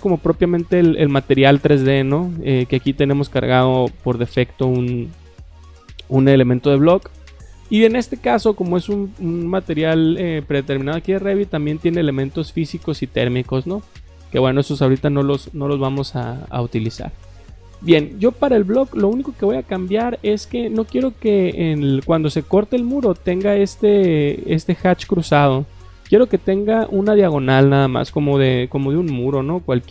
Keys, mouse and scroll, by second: 11.1 click, 12.3 click, 13.8 click, 19.0 click, 25.7 click, 29.4 middle click.